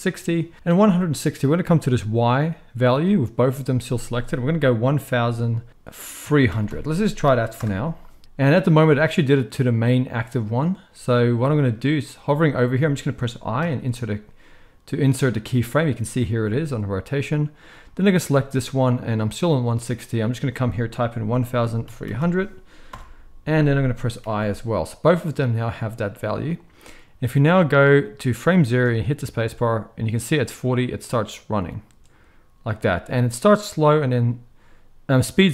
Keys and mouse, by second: 6.6 0, 13.6 i, 17.8-20.1 middle drag, 20.1-25.1 drag, 22.1 0, 24.2 i, 25.1-26.4 middle drag, 26.4 click, 26.5 middle click, 27.4-35.5 drag, 28.7 space.